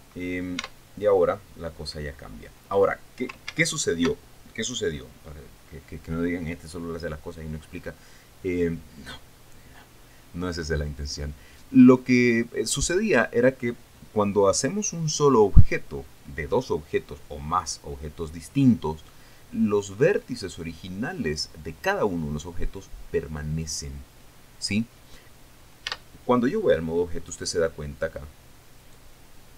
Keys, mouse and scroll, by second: 0.4 ctrl+2, 1.2 Tab, 2.2 scroll down 2, 3.3 scroll up 2, 4.0 ctrl+z, 26.5 Tab, 27.6-28.0 scroll up 2, 29.4 right click.